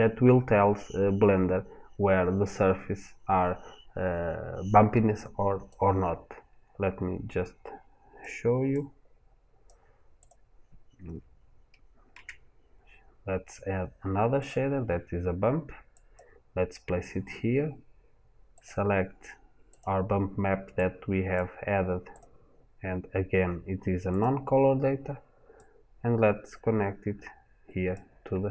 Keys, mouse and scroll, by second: 8.6 click, 14.3 shift+a, 19.2 click.